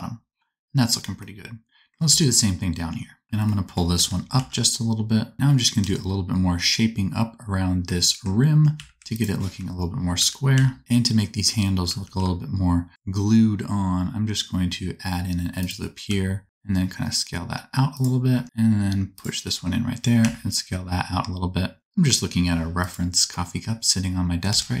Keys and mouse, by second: 1.3 click, 2.0 Tab, 3.2 i, 3.9 g, 5.8 Tab, 8.7 1, 10.1 g, 12.0 ctrl+r, 16.0 s, 18.4 ctrl+r, 20.1 s, 24.4 Tab.